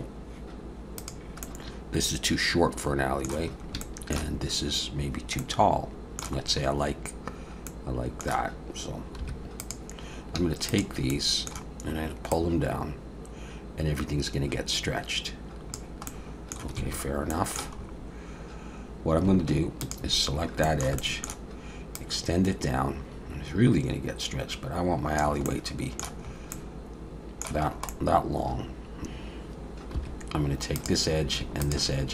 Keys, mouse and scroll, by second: 1.1 click, 1.5 middle click, 3.5 scroll up 1, 3.8 shift+middle click, 5.4 middle click, 6.5-6.8 scroll up 2, 7.3-7.7 scroll down 3, 7.7 middle click, 9.2 2, 9.6 click, 10.7 shift+click, 11.1 middle click, 12.3 click, 16.1 middle click, 16.8 alt+a, 17.3 middle click, 17.8 scroll up 1, 19.1 scroll up 1, 19.9 alt+shift+click, 20.4 scroll down 2, 20.6 shift+middle click, 21.0 middle click, 22.0 click, 25.5 middle click, 26.2-26.5 scroll up 2, 26.5 middle click, 27.6 scroll up 2, 27.9 middle click, 29.0 alt+a, 29.9 2, 30.8 click, 31.6 shift+click.